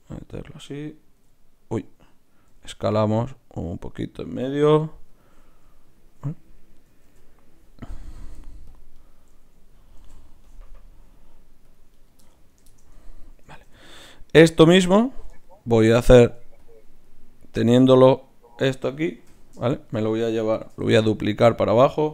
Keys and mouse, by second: 1.0 x, 2.5 s, 5.1 g, 7.0 ctrl+r, 10.0 ctrl+r, 13.4 a, 13.6 a, 15.7 shift+Tab, 16.6 click, 19.3 KP_3, 20.6 shift+d, 21.8 click.